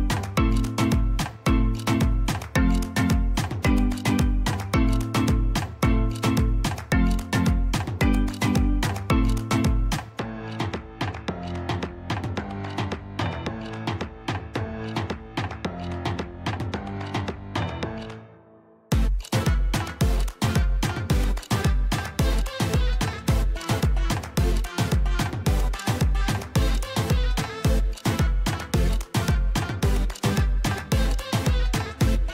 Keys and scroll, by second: 0.0 Escape, 4.6 Delete, 8.0 \, 26.8 \, 30.1 ctrl+z, 30.9 ctrl+z.